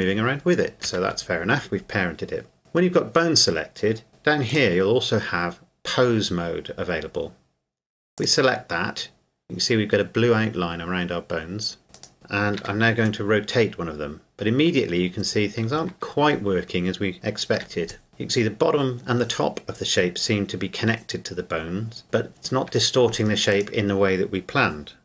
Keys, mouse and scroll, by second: 0.8 g, 1.1 Escape, 4.5 click, 8.2 click, 10.3 scroll up 1, 11.9 right click, 12.6 r, 15.9 Escape, 16.5 scroll down 1, 17.6 r, 22.7 Escape, 23.5 right click.